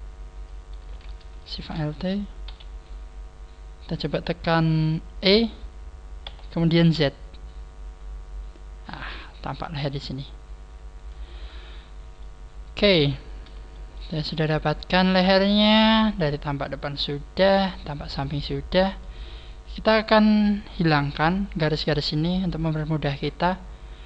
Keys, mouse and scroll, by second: 1.4 alt+shift+right click, 1.7 scroll down 4, 2.5-3.0 scroll down 2, 2.5 KP_3, 6.2 e, 9.5 click, 10.0 click, 11.3-11.7 scroll down 6, 12.1 middle click, 14.1 shift+middle click, 16.0 scroll down 4, 16.7 scroll up 3, 18.3 middle click, 22.5 scroll down 4, 24.0 scroll down 1.